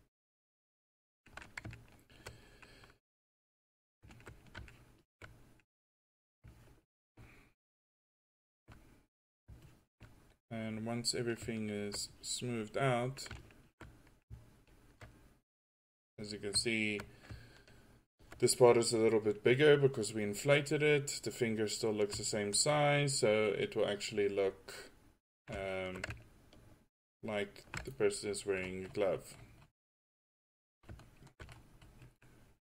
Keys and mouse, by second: 4.8-5.5 drag, 10.7 middle click, 11.0-11.7 middle drag, 12.2-14.1 drag, 14.1 middle click, 14.9 middle click, 15.0 click.